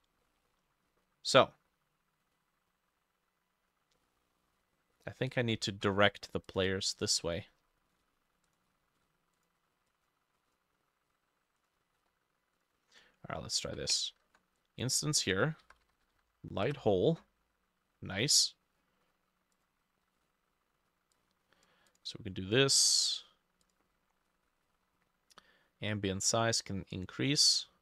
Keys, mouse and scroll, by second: 0.9 scroll up 3, 1.0 middle click, 1.6-2.4 scroll down 1, 2.4 scroll up 1, 4.0 middle click, 5.0 middle click, 10.4 double click, 12.0-12.6 scroll up 5, 14.0 ctrl+right click, 15.7-16.7 typing, 16.7 Return, 22.8-24.6 scroll down 4.